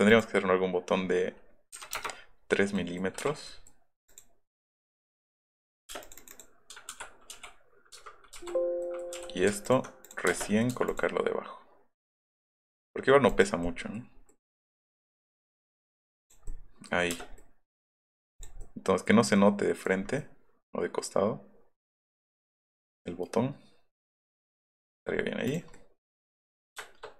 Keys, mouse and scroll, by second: 0.1 click, 1.9 KP_Enter, 2.4 scroll up 2, 2.8 middle click, 3.5 middle click, 4.1 click, 5.4 click, 5.7 middle click, 5.9 space, 6.0 click, 6.9 ctrl+g, 7.4 b, 8.4 b, 8.8 click, 9.2 b, 9.6 alt+click, 10.1 middle click, 10.3 space, 10.4 middle click, 10.9 middle click, 12.2 click, 12.4 click, 13.3 click, 13.8 middle click, 15.7 click, 16.2 click, 16.8 middle click, 17.1 space, 17.3 middle click, 18.6-20.0 middle drag, 24.3 middle click, 25.0 middle click, 25.5 click, 25.6 middle click.